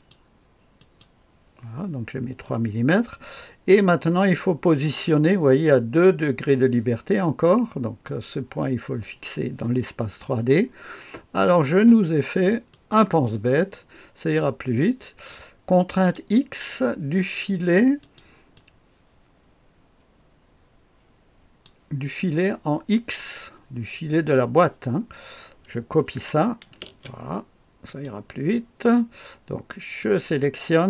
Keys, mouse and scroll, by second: 0.7 click, 3.8-12.6 scroll up 1, 12.6 click, 14.3-16.6 drag, 18.0 click, 18.5-22.0 drag, 26.8 ctrl+c, 27.8 click, 29.9 click.